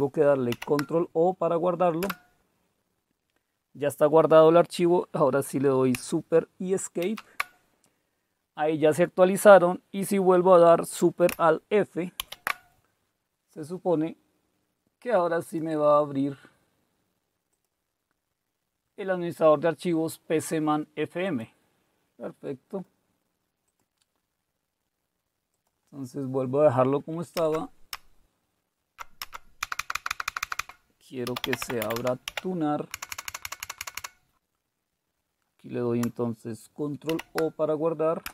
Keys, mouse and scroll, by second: 0.5 ctrl+o, 2.0 Return, 7.0 super+Escape, 12.2 alt+super+f, 15.4 click, 17.5 click, 21.2 click, 22.7-23.9 drag, 25.5 click, 27.4 Up, 27.9-29.2 Up, 29.6 Left, 29.8 Left, 29.9 Left, 30.1 Left, 30.2 Left, 31.0-34.1 typing, 32.9 Delete, 33.0 Delete, 33.2 Delete, 37.0 ctrl+o, 38.0-38.3 typing.